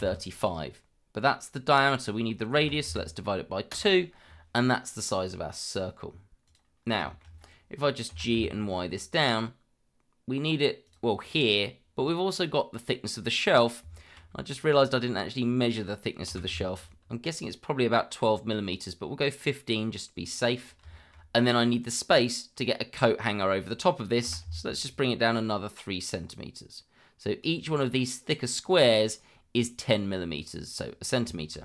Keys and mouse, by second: 6.4 click, 7.0 shift+middle drag, 8.1 g, 8.3 y, 10.8-11.4 drag, 14.0 shift+middle click, 16.3 g, 16.5 y, 20.3 click, 20.9 shift+middle drag, 24.2 g, 24.4 y, 31.4 shift+middle drag.